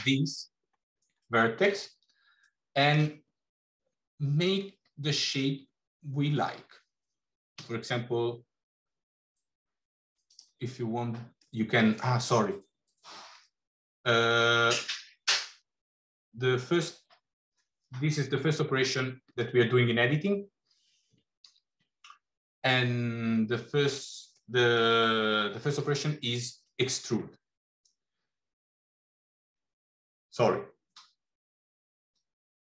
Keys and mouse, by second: 1.1 shift+middle click, 2.4 middle click, 7.4 e, 11.3 middle click, 21.4 ctrl+z, 24.2 middle click.